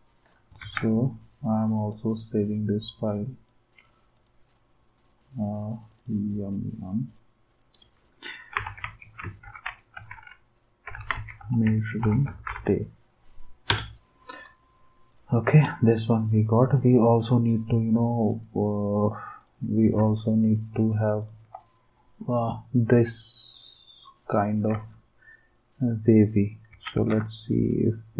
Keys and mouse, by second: 0.6 ctrl+s, 3.4-5.1 drag, 5.8 click, 7.1 click, 8.3-11.4 typing, 13.7 Return, 20.0 alt+Tab, 24.7 alt+Tab, 26.7 alt+Tab.